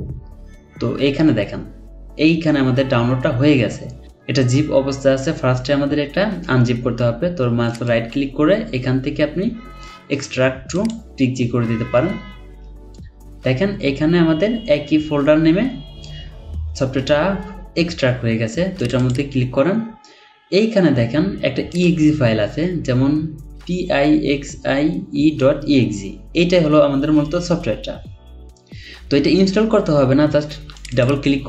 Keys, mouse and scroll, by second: 7.7 right click, 19.0 double click, 30.9 double click.